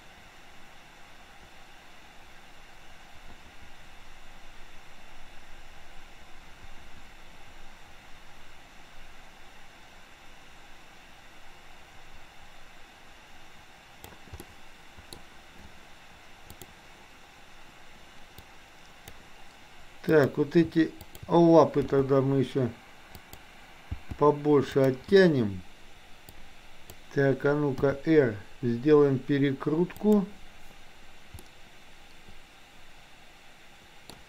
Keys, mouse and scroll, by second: 14.4-15.1 middle drag, 18.5 click, 20.1 click, 21.0 shift+click, 21.9 g, 24.0 g, 26.4 click, 27.9 r, 31.4-34.1 middle drag.